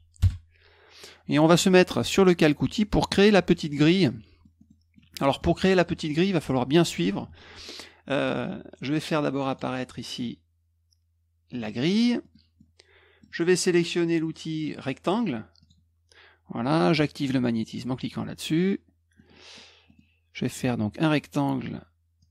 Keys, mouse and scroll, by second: 0.0-0.1 typing, 0.2 Return, 4.0 middle click, 4.5 middle click, 4.9 middle click, 5.3 middle click, 5.7 middle click, 9.5 click, 11.5 click, 12.2 middle click, 12.5 middle click, 15.6 click, 17.7 click, 19.1 middle click, 19.8 middle click, 22.2-22.3 drag.